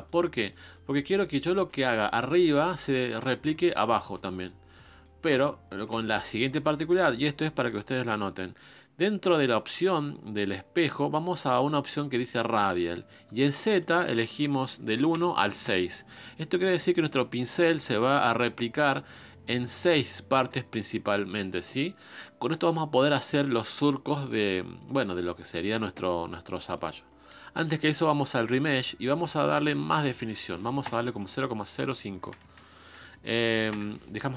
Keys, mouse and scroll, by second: 33.6 click.